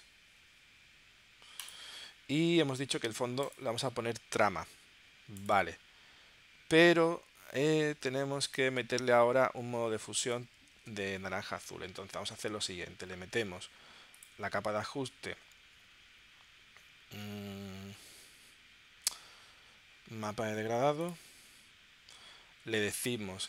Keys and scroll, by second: 6.9 super+Tab, 8.8 space, 10.2 space, 10.8 super+Tab.